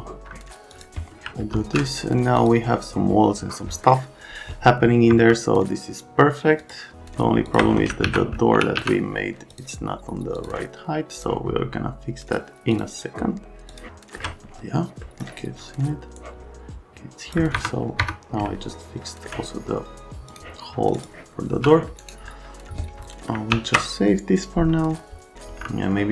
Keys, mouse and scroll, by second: 0.7 click, 1.5 alt+x, 2.4 click, 5.1 F3, 6.6 click, 7.5 right click, 8.1 alt+q, 8.5 f, 8.8 z, 9.5 click, 10.3 click, 11.1 click, 12.7 click, 13.7 click, 13.9 alt+middle click, 15.0 right click, 16.2 click, 17.5 F3, 18.0 F3, 18.5 alt+middle click, 20.3 click, 20.9 click, 21.5 c, 22.0 scroll up 1, 22.7 click, 23.5 ctrl+s, 25.5 F3.